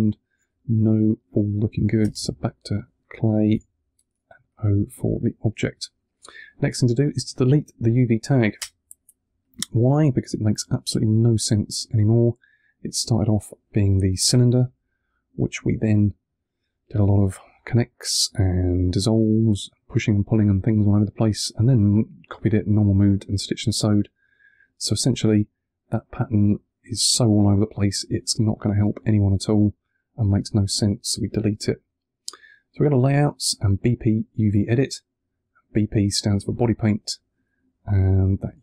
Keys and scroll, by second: 3.4 o, 8.5 BackSpace, 9.1 1.